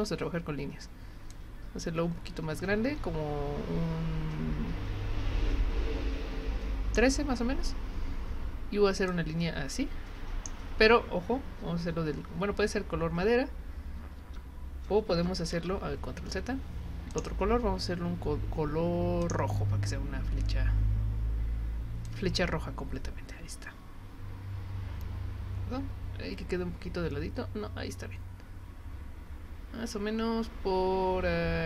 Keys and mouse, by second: 1.3 click, 9.1-10.5 drag, 17.1 click, 19.2 click, 22.1-31.6 drag.